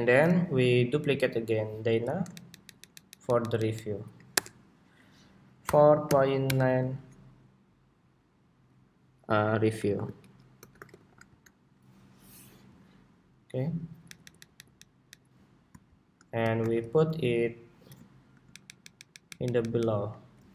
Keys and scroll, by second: 1.5 super+d, 12.4 Escape, 13.7 alt+Down, 14.3 alt+Down, 15.0 alt+Down, 16.3 super+g, 18.4 alt+shift+Down, 19.4 alt+shift+Down.